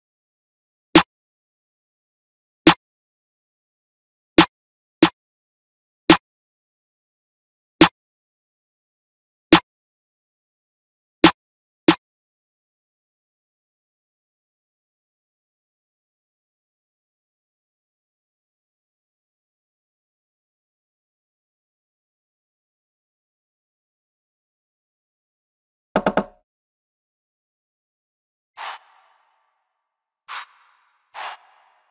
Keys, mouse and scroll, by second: 13.9 F1, 14.3 F1, 19.8 F1, 27.1 F1.